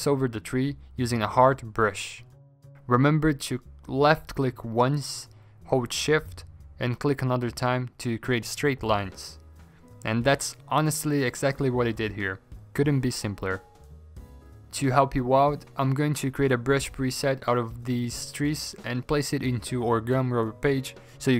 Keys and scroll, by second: 0.0-1.3 typing, 2.5-3.2 typing, 14.3 ctrl+z, 15.5 ctrl+z, 16.6 ctrl+z, 17.4 ctrl+z, 18.9-19.7 typing, 20.3 ctrl+z, 20.4 ctrl+z.